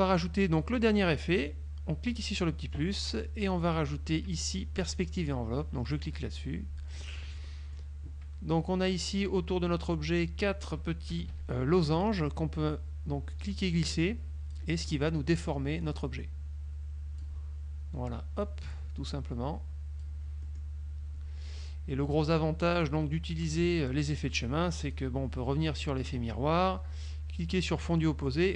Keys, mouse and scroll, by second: 2.2 click, 3.3-3.7 scroll down 1, 5.0 click, 6.0 click, 7.1 middle click, 11.2 KP_Subtract, 13.4 click, 15.9 click, 18.5 click, 20.5 middle click, 22.8 click, 24.9 click, 27.9 click.